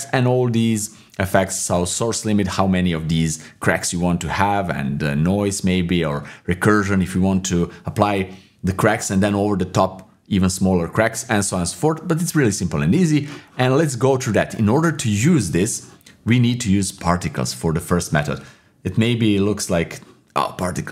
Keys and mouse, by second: 14.4-15.6 middle drag, 16.9 click, 20.8 middle click.